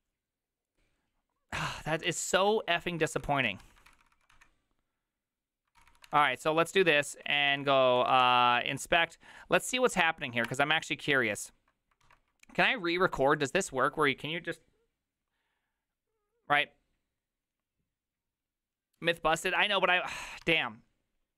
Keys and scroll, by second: 3.1 ctrl+c, 3.1 Up, 3.2 ctrl+c, 3.4 ctrl+a, 3.7 3, 3.9 ctrl+c, 4.2 ctrl+c, 4.3 Up, 5.8 ctrl+c, 6.1 Up, 6.2 Up, 6.8 ctrl+Left, 6.9 ctrl+Left, 7.6 ctrl+Left, 8.0 -, 8.1 -, 8.2 Up, 10.5 Return, 12.1 alt+[, 20.5 alt+{.